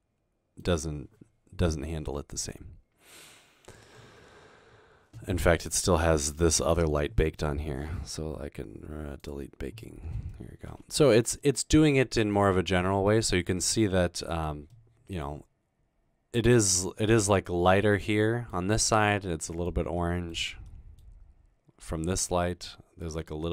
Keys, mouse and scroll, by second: 1.7-3.3 middle drag, 5.5 middle click, 8.4-9.2 scroll down 2, 12.7 middle click, 13.6-14.6 scroll up 1, 14.9-15.5 middle drag, 16.7 middle click, 19.4-19.8 middle drag, 20.2 middle click.